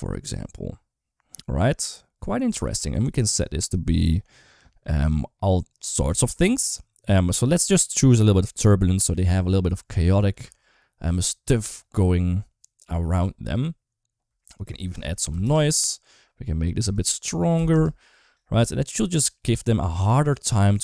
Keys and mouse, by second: 2.4 space, 2.9-7.6 drag, 8.5 click, 10.3 space, 14.4 click, 16.8 click.